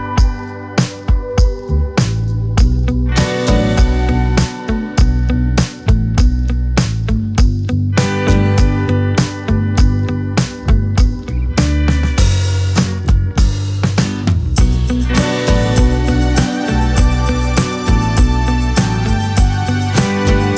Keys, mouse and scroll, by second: 0.5 KP_Decimal, 2.0-3.0 drag, 6.3-8.3 drag, 9.1 click, 9.4-9.8 scroll up 7, 10.2 click, 10.8-11.8 drag, 11.8-12.4 scroll up 7, 12.4-12.9 drag, 12.9-14.0 scroll up 5, 14.0-15.5 drag, 15.5-16.1 right drag, 16.1-18.5 drag, 20.1 drag.